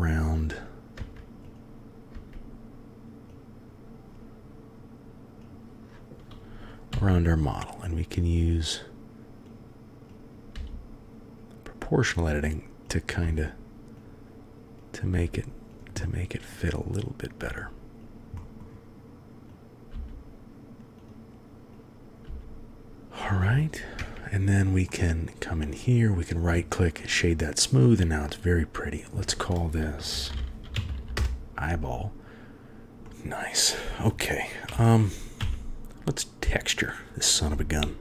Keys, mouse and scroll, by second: 0.5 click, 0.9 Tab, 1.4 click, 2.1 Tab, 3.2-3.7 drag, 5.3 click, 6.9 g, 10.2 click, 10.5 g, 13.0-14.1 drag, 13.2 g, 14.7 click, 15.1 g, 16.1-16.5 drag, 17.2 click, 17.4 g, 18.4 click, 19.6 click, 19.9 g, 21.7-22.1 drag, 22.2 g, 22.9 KP_1, 23.9 Tab, 24.8 middle click, 24.9 drag, 25.0 middle drag, 26.1 click, 28.8 click, 29.0-31.1 drag, 30.9 l, 32.3 ctrl+z, 33.0 middle click, 34.6 KP_1, 35.3 KP_3.